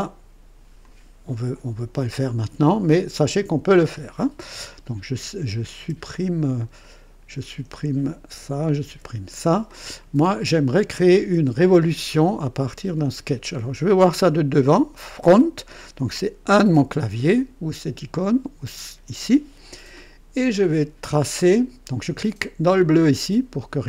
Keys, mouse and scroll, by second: 0.8 click, 5.8 BackSpace, 6.8 click, 8.3 Delete, 8.6 click, 8.9 Delete, 9.7 click, 11.0 click, 16.5 KP_1, 22.7 click.